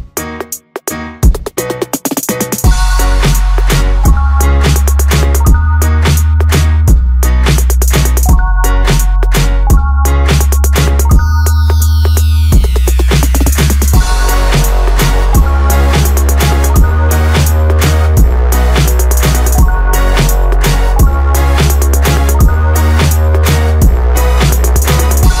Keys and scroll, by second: 0.0 Return.